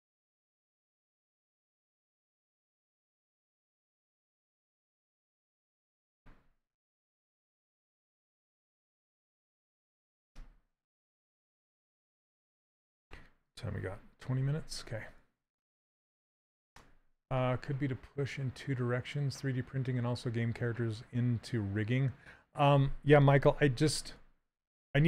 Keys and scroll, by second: 1.0 s, 24.5 s.